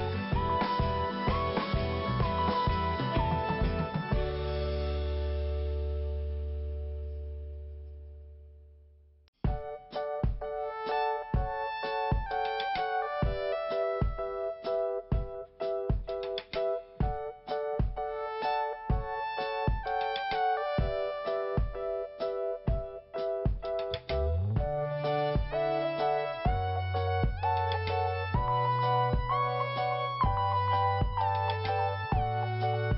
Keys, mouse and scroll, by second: 0.9 click, 2.4 click, 7.2 click, 9.0 click, 12.8 click, 15.0 click, 16.7-17.1 scroll down 1, 17.1 p, 18.3 click, 19.5 scroll down 1, 20.0 scroll up 1, 20.9 click, 21.0 click, 22.2 click, 22.3 click, 23.1 click, 23.3 click, 24.3 click, 26.2 click, 28.5 scroll down 1, 29.5 click, 29.5 click, 30.5 click, 32.4 click.